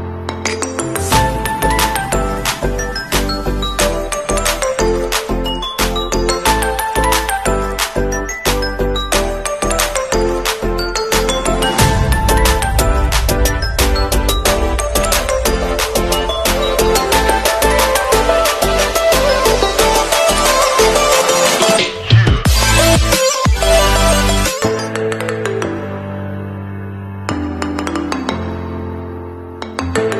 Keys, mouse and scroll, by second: 1.3 Right, 1.4 KP_3, 2.9 KP_0, 3.7 ctrl+a, 5.0 click, 6.1 ctrl+d, 6.9 d, 9.8 click, 11.7 alt+Right, 11.9 alt+Right, 16.5 Return, 17.7 alt+scroll down 1, 18.6 scroll down 1, 19.8 alt+scroll down 1, 19.9 alt+scroll up 1, 20.6 alt+scroll down 1, 21.6 scroll down 1, 21.7 scroll up 1, 22.3 alt+scroll down 1, 23.1-23.7 alt+scroll up 1.